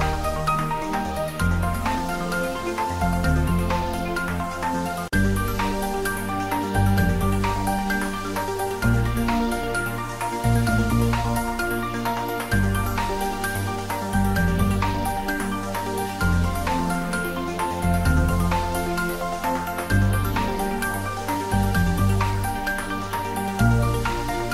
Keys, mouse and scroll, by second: 4.9-7.6 typing, 4.9 click, 6.3 click, 7.5 click, 8.5 shift+middle click, 9.2 middle click, 9.8 shift+click, 11.0-12.3 typing, 12.2 click, 12.7-15.1 middle drag, 15.1 Tab, 15.3 click, 15.8 4, 16.2 click, 16.7 i, 18.3 click, 18.6 e, 20.1 click, 20.2 Tab, 20.5 middle click, 21.0 Tab, 21.5 g, 22.8 y, 22.8 click, 23.1 Tab, 23.3-24.5 middle drag.